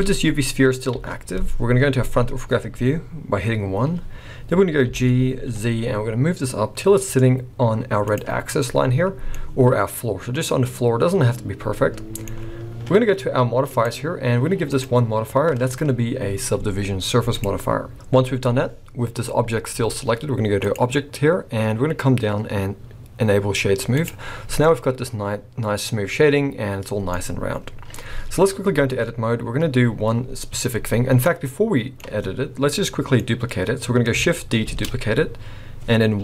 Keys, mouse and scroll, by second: 0.9 KP_1, 1.7-2.2 scroll up 5, 4.9 g, 9.3 middle click, 13.7 click, 14.7 click, 19.4-20.7 scroll down 1, 20.7 click, 24.6 middle click, 31.3 middle click, 32.8 middle click, 33.6-34.1 scroll down 2, 34.8 shift+d.